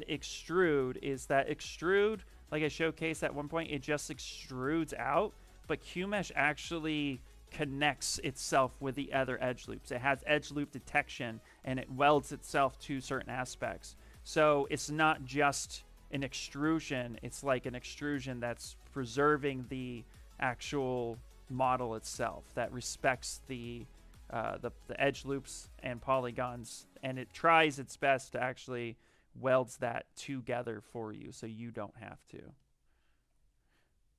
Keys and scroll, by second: 4.6 s, 23.4-24.5 typing, 30.8-31.7 typing, 33.4 ctrl+z.